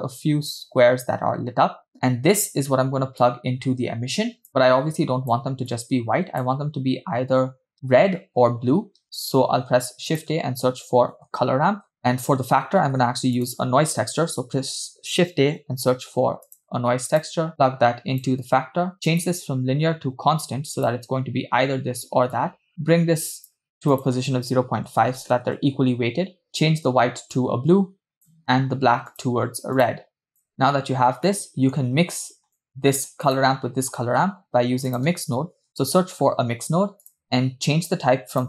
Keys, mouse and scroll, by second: 1.9 middle click, 1.9 scroll down 2, 3.2-4.5 drag, 4.6-5.3 drag, 5.7 click, 9.5 shift+a, 12.0 middle click, 12.8 shift+a, 17.6 click, 19.3-21.1 drag, 22.4-23.7 drag, 24.1-25.7 drag, 26.5 click, 29.3 drag, 29.9 click, 30.9-31.5 scroll down 2, 31.5 middle click, 32.5 click, 33.3 click, 34.0 shift+a, 37.6-38.1 scroll up 2, 38.3-38.4 drag.